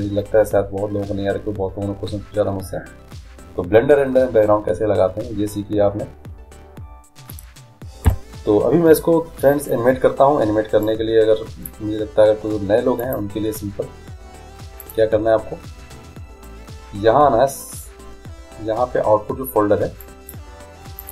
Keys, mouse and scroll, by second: 8.1 n, 10.9-12.9 drag, 13.1 click, 14.9-16.7 drag, 20.1-21.1 drag.